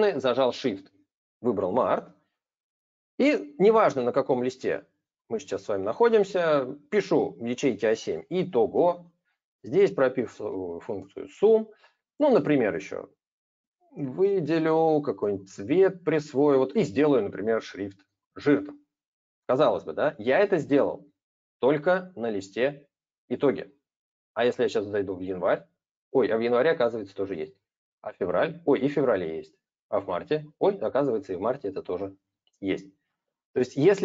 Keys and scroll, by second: 10.3 alt+=, 10.8 ctrl+Return.